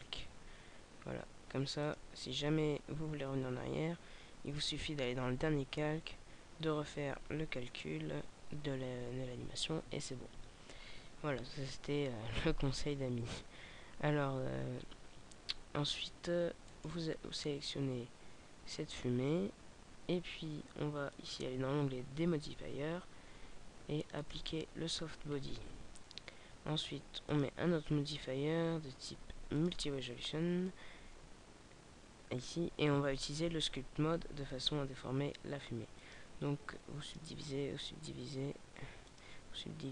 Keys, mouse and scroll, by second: 1.7 click, 16.7 right click, 24.2 click.